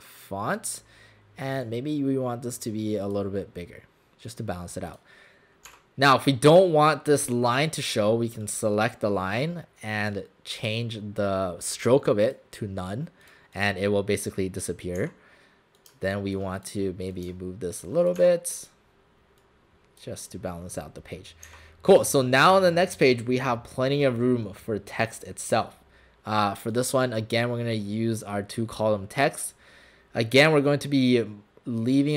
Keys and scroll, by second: 5.7 w, 15.0 w, 18.2 shift+w, 21.6 w.